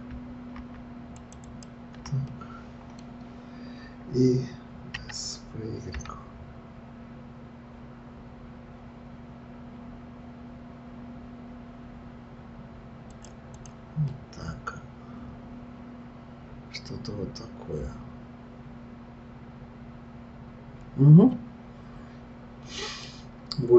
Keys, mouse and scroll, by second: 1.1 shift+click, 1.4 shift+click, 2.3-5.0 middle drag, 5.0 s, 13.6 click, 14.1-17.1 middle drag, 23.2-23.7 scroll down 2.